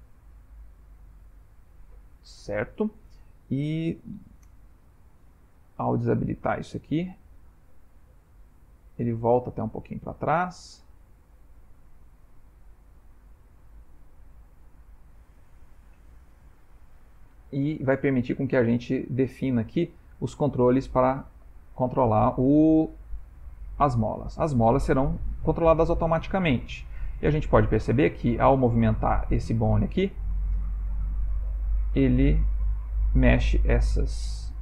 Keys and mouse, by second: 6.7 click, 7.9 click, 8.8 click, 10.5 click, 11.0 click, 11.6 click, 12.0 click, 13.3 click, 13.9 click, 14.6 click, 17.2 click, 17.9 middle click, 19.0-19.5 ctrl+middle click, 19.6 middle click, 20.1 middle click, 20.6-21.1 shift+middle click, 21.0 shift+middle click, 21.2 ctrl+middle click, 24.1 click, 26.3 s, 28.3 Escape, 28.7 r, 30.5 s, 33.7 shift+middle click, 34.4 middle click.